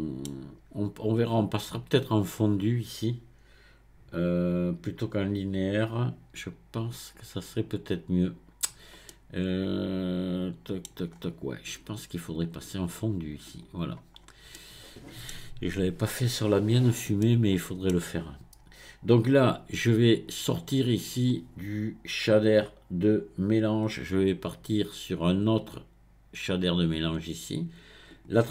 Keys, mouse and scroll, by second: 9.1-11.1 middle drag, 11.1-12.1 scroll up 1, 12.4-14.1 drag, 14.1-14.5 scroll down 1, 14.5-20.3 middle drag, 20.3-23.4 drag, 25.3 drag, 28.1 click.